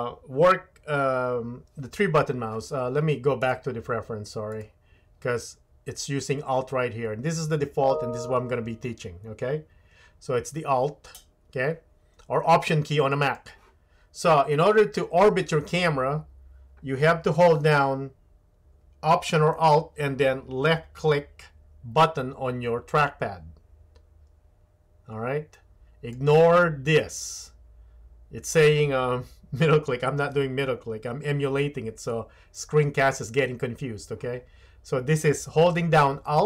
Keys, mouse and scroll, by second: 3.5-4.9 drag, 23.0-26.1 alt+middle drag.